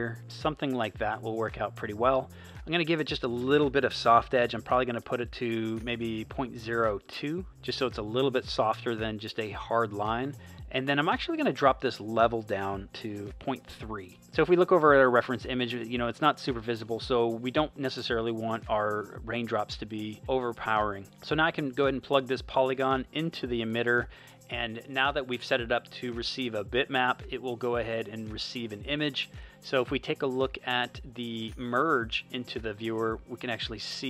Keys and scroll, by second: 7.0 2, 13.2 3, 14.1 space.